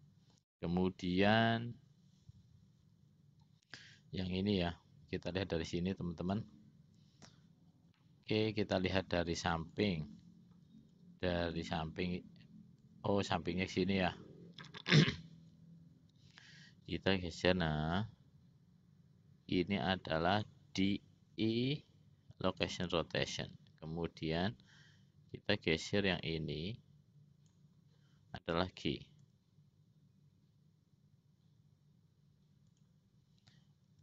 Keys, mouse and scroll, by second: 1.4 click, 4.2-6.7 drag, 8.1 middle click, 9.2 `, 10.8 `, 13.2 `, 16.9-20.8 drag, 21.5 i, 24.7-27.8 drag, 29.4 o.